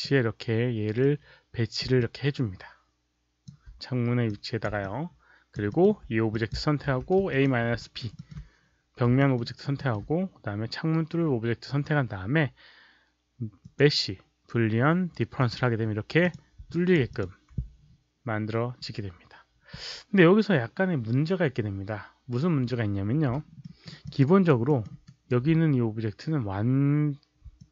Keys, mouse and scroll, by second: 0.9-1.7 drag, 2.0-3.4 alt+drag, 4.2 click, 4.7-5.5 alt+drag, 5.6 alt+middle click, 6.2 click, 6.8 q, 7.2 shift+click, 7.2 alt+right click, 7.2 w, 7.7 alt+right click, 8.1 alt+middle click, 9.2 alt+middle click, 9.4 alt+right click, 9.7 alt+middle click, 13.5 click, 15.3 click, 16.1 click, 16.7 alt+click, 17.0 alt+click, 23.5 alt+middle click, 23.9 alt+click, 24.2 alt+right click, 24.6 alt+middle click, 25.0 alt+right click, 27.5-27.7 alt+drag.